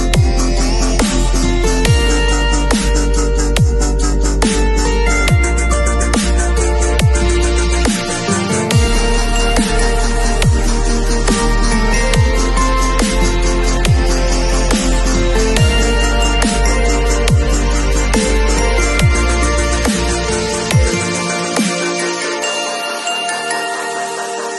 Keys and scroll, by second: 0.0 super+v, 0.8 v.